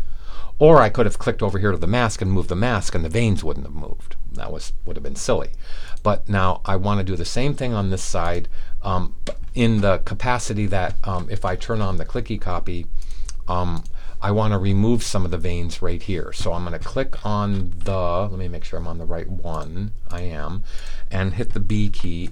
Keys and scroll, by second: 21.8 b.